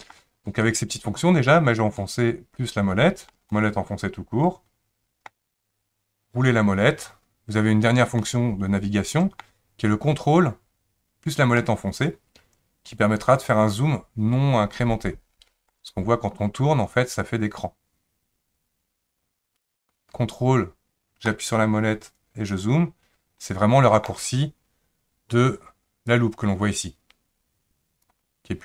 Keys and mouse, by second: 0.5-1.6 shift+middle drag, 2.0-3.3 shift+middle drag, 3.5-5.3 middle drag, 8.2-9.4 middle drag, 11.6-15.7 ctrl+middle drag, 21.4-24.1 ctrl+middle drag, 26.1-28.1 drag.